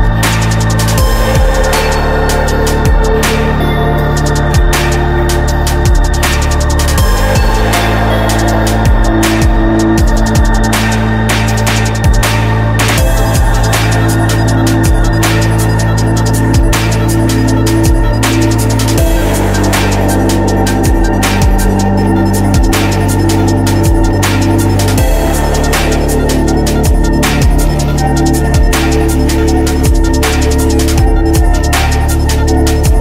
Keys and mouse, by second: 0.2-1.8 drag, 2.6 middle click, 2.8-3.8 drag, 3.8 right click, 5.0 click, 8.0 click, 8.9 middle click, 9.8 click, 11.4-12.7 drag, 13.3 click, 13.6 middle click, 13.7 click, 15.5-16.7 drag, 18.6 Tab, 20.7 Tab, 21.7 ctrl+r, 23.0 ctrl+r, 23.7 ctrl+r, 24.4 ctrl+r, 25.0-27.8 drag, 32.3 click.